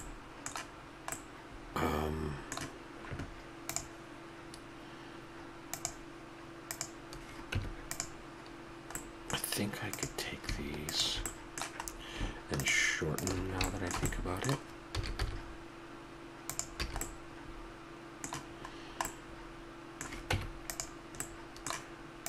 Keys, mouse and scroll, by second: 3.2 middle click, 5.8-6.6 middle drag, 6.6-8.5 drag, 7.4 Tab, 9.0 middle click, 9.9-11.0 drag, 11.0 middle click, 14.9 s, 16.8 a, 18.7 middle click, 20.3 Tab.